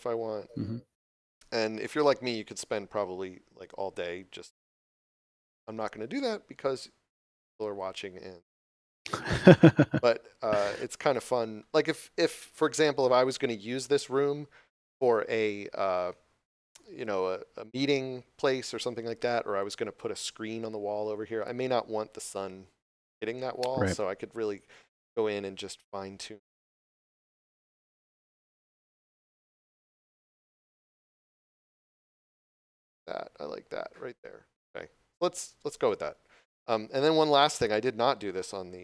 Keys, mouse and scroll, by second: 9.1 middle click, 11.9 shift+middle click, 12.8 scroll up 1, 13.2 middle click, 24.5 click, 37.1 scroll down 1, 37.7 shift+middle click.